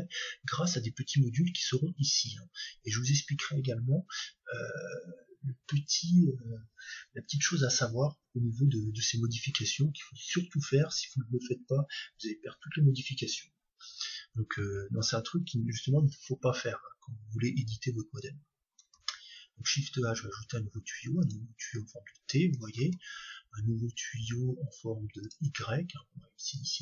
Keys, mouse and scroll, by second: 19.0 shift+a, 22.8 shift+a, 26.6-26.8 drag.